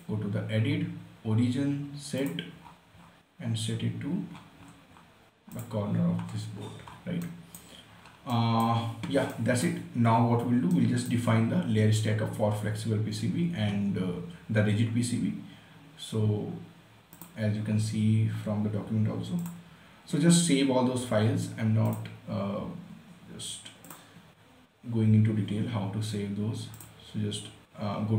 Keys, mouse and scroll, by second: 2.5 click, 2.9 scroll up 1, 5.9 click, 6.3 scroll down 1, 7.5 right click, 8.3 scroll up 1, 8.6-13.9 right drag, 17.5 click, 19.8 click, 22.2 click, 27.1 click.